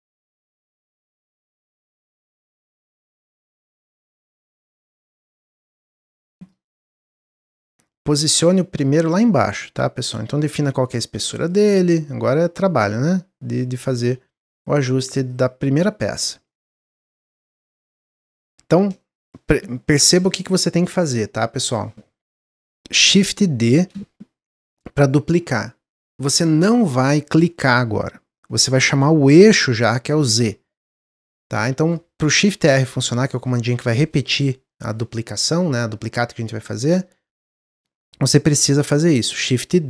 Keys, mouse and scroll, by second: 0.6 click, 3.4-5.3 middle drag, 5.3-7.8 drag, 8.5 middle click, 9.4-11.7 drag, 11.7 middle click, 11.9-12.4 scroll up 2, 12.8 click, 14.4 click, 16.4-16.8 middle drag, 16.8 scroll down 1, 17.1 middle click, 17.7 click, 18.9-22.1 shift+middle drag, 23.7 shift+d.